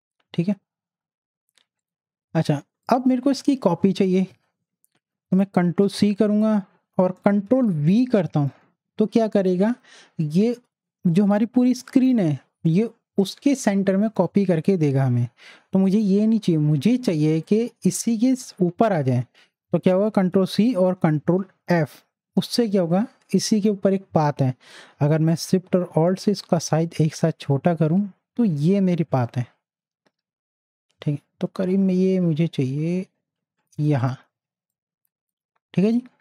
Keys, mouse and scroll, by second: 0.0 space, 1.8 click, 5.5 click, 5.8 ctrl+c, 8.2 ctrl+v, 17.4 ctrl+v, 19.4 click, 20.2 ctrl+c, 21.6 ctrl+f, 25.3 ctrl+f, 26.7-34.0 alt+shift+drag, 34.0 click, 34.3 z, 34.7-36.2 drag.